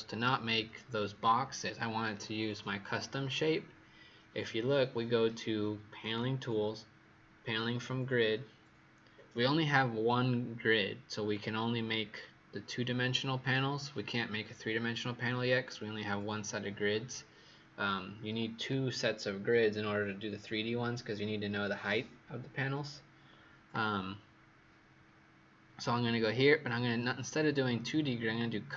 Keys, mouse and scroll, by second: 5.9 click.